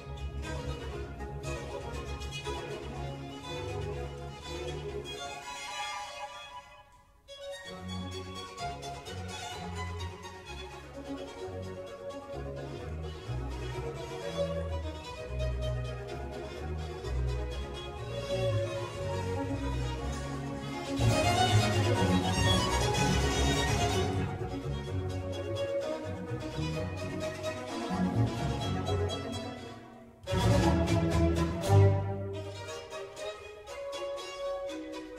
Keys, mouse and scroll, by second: 1.3 click, 3.1-3.5 scroll up 2, 3.5-4.7 shift+middle drag, 4.7 ctrl+r, 9.4 click, 9.8 Tab, 10.2 scroll down 1, 10.4 click, 10.8-11.3 middle drag, 11.3-11.9 scroll up 1, 11.9-13.0 shift+middle drag, 13.0 click, 13.6 space, 16.3 click, 17.0 click, 17.3 space, 19.1 click, 19.4-22.4 middle drag, 24.9-25.8 shift+middle drag, 25.8 click, 26.3-27.8 middle drag, 27.8 scroll down 1, 28.0-31.0 middle drag, 34.2 click.